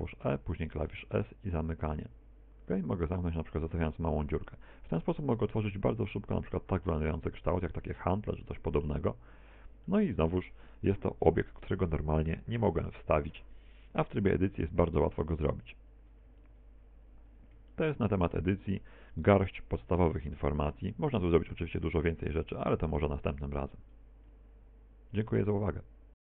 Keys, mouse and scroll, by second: 0.0 e, 3.7 click, 4.0 Tab, 4.4 middle click, 5.4 middle click, 8.0-8.6 scroll down 5, 8.4 middle click, 9.2 middle click, 9.9 shift+middle click, 16.3 x, 17.7 shift+middle click, 18.4 middle click, 19.2 middle click, 20.4 middle click.